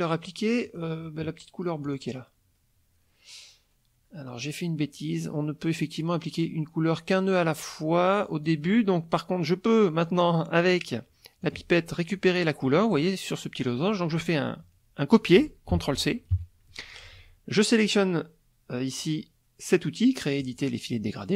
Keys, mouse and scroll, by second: 0.6 click, 1.8 click, 8.4 click, 11.4 click, 12.6 middle click, 15.7 ctrl+c, 16.3 ctrl+KP_Subtract, 20.4 click.